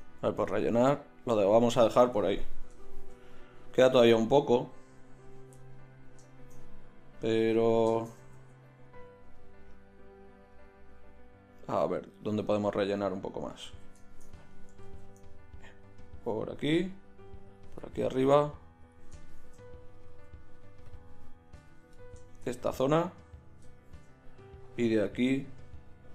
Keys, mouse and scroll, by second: 8.4 ctrl+z, 11.9-13.7 middle drag, 13.7 ctrl+z, 14.0-17.8 drag, 14.9 ctrl+z, 19.3 middle click, 19.5 click, 19.6-23.5 middle drag, 25.3 middle click, 26.0 middle click.